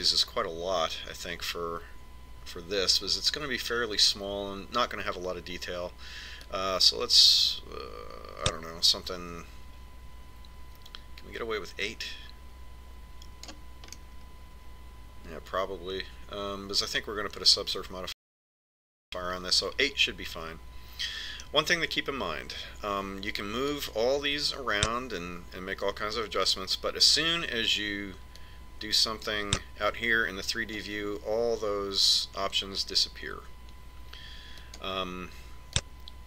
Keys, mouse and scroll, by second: 8.4 click, 15.9-17.7 middle drag, 24.7 click, 29.4 click, 35.7 click.